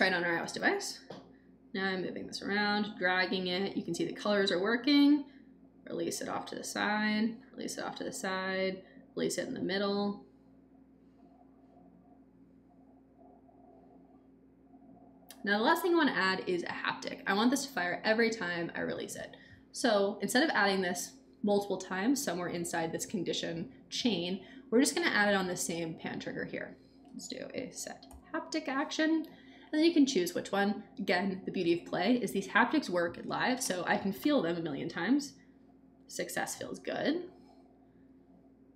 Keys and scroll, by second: 27.4-28.6 typing.